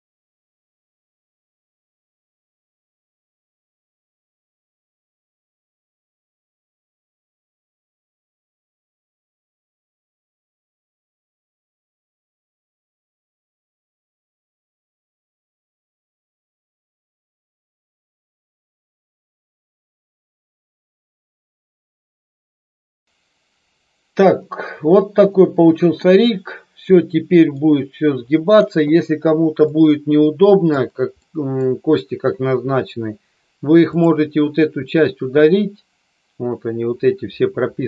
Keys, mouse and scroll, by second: 0.4-0.8 middle drag, 2.1-2.9 drag, 3.7 KP_1, 4.9-9.6 middle drag, 15.7 n, 17.0 middle click, 18.5 shift+middle click, 24.4-26.0 middle drag, 27.0 middle click, 29.6-30.6 middle drag, 31.2 middle click, 33.8 click.